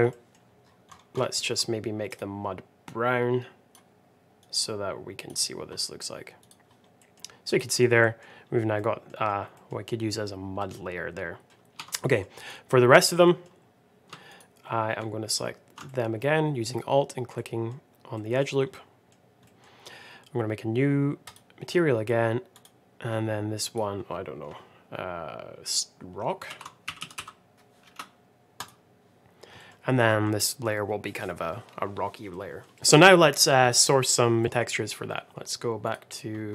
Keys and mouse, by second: 0.2 middle drag, 1.3 middle drag, 2.0 click, 6.4 click, 6.9 middle click, 7.9 middle click, 8.7 middle click, 9.4 middle click, 10.5 middle click, 11.6 Tab, 11.7 Tab, 12.0 middle click, 12.3 click, 13.1 middle click, 14.2 alt+click, 15.2 alt+shift+click, 15.8 middle click, 17.3 middle click, 18.0 middle click, 18.6 middle click, 19.4 middle click, 21.2 click, 22.4 click, 23.7-28.0 drag, 28.5 click, 30.0 middle click, 30.3 click, 32.2 middle click, 32.8 middle click, 33.0 middle click, 34.4 middle click.